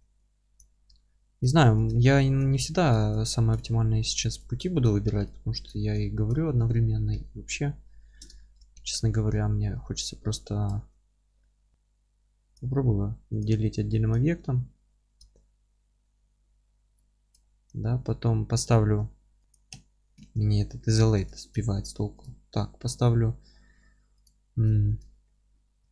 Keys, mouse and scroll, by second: 0.5 click, 0.9 alt+middle click, 1.5 ctrl+click, 1.9 alt+middle click, 2.9-6.0 ctrl+drag, 5.7 scroll up 1, 6.0-13.4 alt+middle drag, 6.5 F3, 8.7 shift+d, 10.6 Escape, 10.7 ctrl+z, 12.5 p, 13.4 click, 13.7 Tab, 14.1 click, 14.8-19.4 middle drag, 15.8 alt+q, 17.1 scroll up 1, 17.9 Tab, 19.4 Escape, 19.5 click, 20.2 alt+q, 20.6-22.2 alt+middle drag, 21.0 Tab, 22.2 click, 22.4-24.2 middle drag, 24.2 click, 24.7-25.9 alt+middle drag.